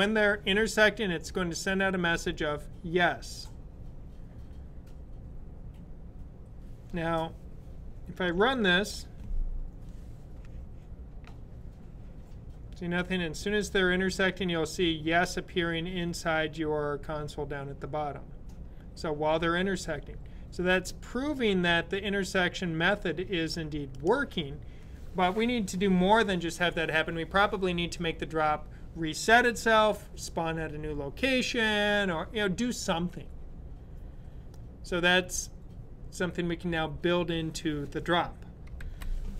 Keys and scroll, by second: 8.3 super+b.